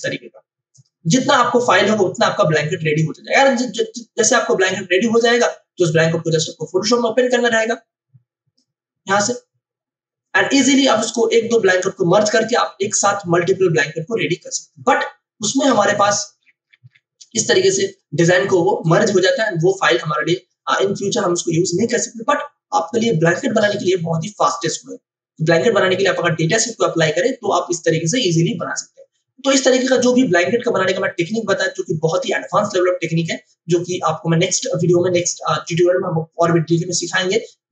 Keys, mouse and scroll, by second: 4.6 click, 5.7-15.6 drag, 15.6 v, 16.4-17.1 scroll down 2, 17.3 click, 31.1 click.